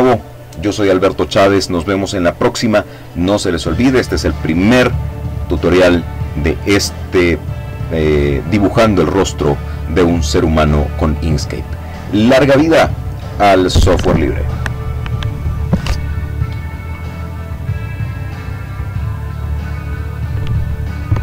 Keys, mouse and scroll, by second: 17.7 click, 18.5-21.2 drag.